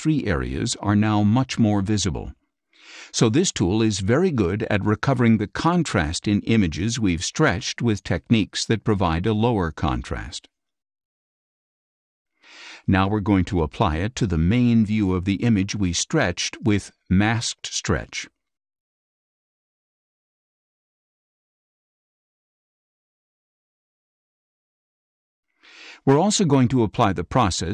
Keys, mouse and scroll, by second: 7.5 click, 8.5 click, 12.1 click, 14.4-18.2 drag.